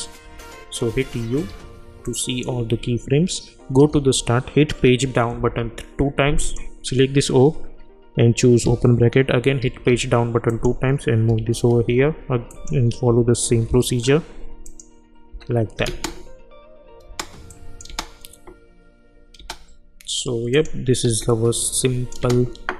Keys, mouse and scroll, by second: 0.2 u, 0.9 u, 1.5 u, 2.0 click, 3.2 scroll down 1, 3.7 =, 3.9 =, 5.3 Page_Down, 6.4 click, 8.6 [, 9.6 Page_Down, 10.5 click, 11.3 [, 11.7 Page_Down, 12.5 click, 13.0 [, 13.5 Page_Down, 14.0-14.6 scroll up 1, 14.6 click, 15.3 [, 15.9 space, 17.5 click, 17.9 space, 20.5 click, 21.0 u, 21.8 click, 22.2 space.